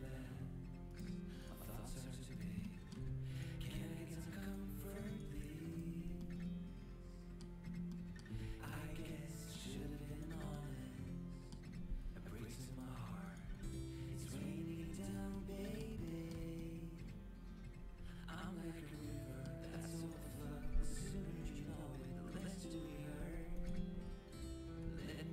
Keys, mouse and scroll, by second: 1.3 g, 2.1 g, 3.5 g, 5.2 g, 6.1-7.1 middle drag, 8.2 z, 10.0-11.8 middle drag, 11.8 g, 14.1-15.2 right drag, 14.1 g, 15.2-18.4 middle drag, 19.9-22.0 right drag, 22.0 g, 23.1 z, 23.4 right click, 23.8 z, 25.1 g.